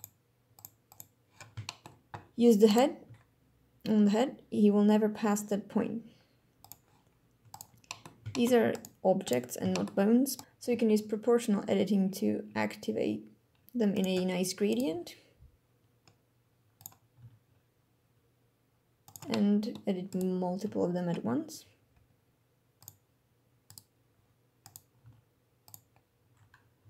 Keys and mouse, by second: 0.0 click, 0.9 click, 1.6-1.9 shift+middle drag, 2.6 right click, 3.0 g, 6.6 click, 7.5 right click, 7.8 middle click, 8.3 shift+drag, 8.7 right click, 9.2 right click, 9.7 shift+click, 10.3 right drag, 10.4 o, 10.7 g, 13.2 click, 16.8 g, 22.3 click, 23.0 click, 23.2 g, 25.1 click, 25.5 r.